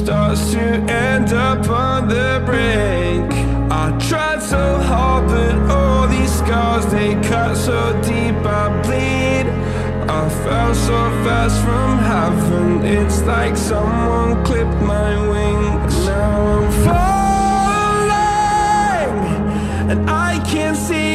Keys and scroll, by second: 13.3 ctrl+z.